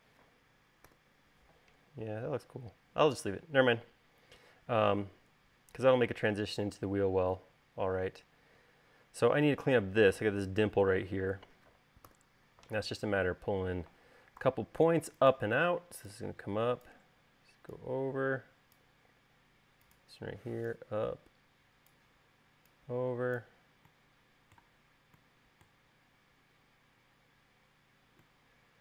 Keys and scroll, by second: 1.1 u, 12.3 u, 14.6 v.